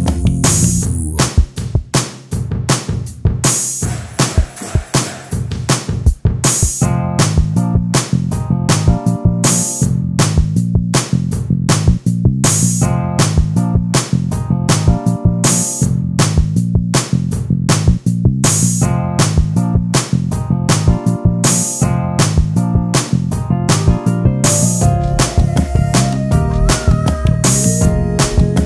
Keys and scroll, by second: 14.9 ctrl+space, 24.5 ctrl+space, 28.1 ctrl+space.